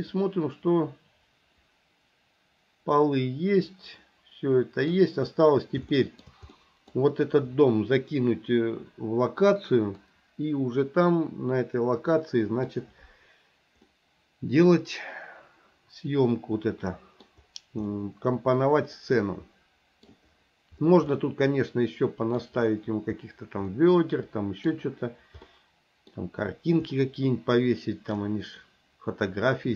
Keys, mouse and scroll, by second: 6.0 shift+middle click, 6.6 middle click, 12.2-12.7 middle drag, 13.9-17.3 middle drag, 17.9-20.1 middle drag, 21.2-22.5 middle drag, 23.7-24.7 middle drag, 25.5 middle click, 27.0-28.2 middle drag.